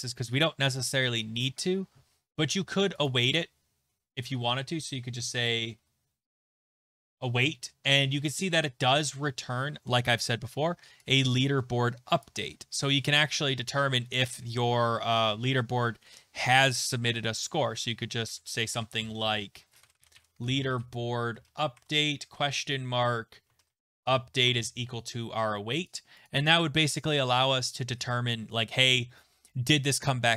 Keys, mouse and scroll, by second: 3.1 click, 3.9-4.5 typing, 5.5-6.7 typing, 12.2 click, 17.5 click, 18.3 Left, 19.3 Left, 19.6-23.5 typing, 27.7 click, 27.7 typing.